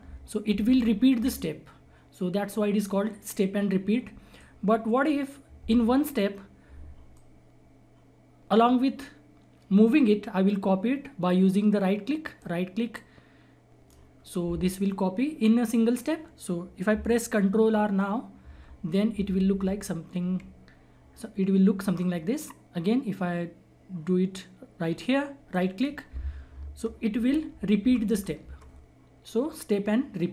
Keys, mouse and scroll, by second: 0.0 ctrl+r, 4.5-12.3 drag, 12.3-16.3 right drag, 16.9 ctrl+Num_Lock, 16.9-18.4 right drag, 18.4 ctrl+r, 21.9-25.5 drag, 25.5-27.1 right drag, 27.1 ctrl+r, 28.7-30.3 scroll down 1.